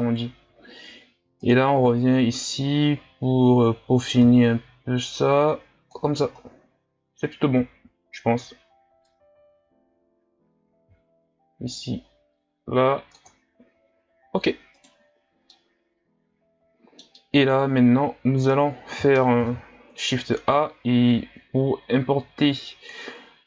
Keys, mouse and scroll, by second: 0.0-0.5 scroll up 1, 0.5 scroll up 1, 1.4-6.5 drag, 6.5-7.0 scroll down 1, 7.0-9.1 scroll down 7, 9.1-12.4 drag, 14.8 right click, 15.2-15.5 scroll down 1, 15.5-18.6 middle drag, 18.6-19.4 scroll up 3, 19.4 shift+a.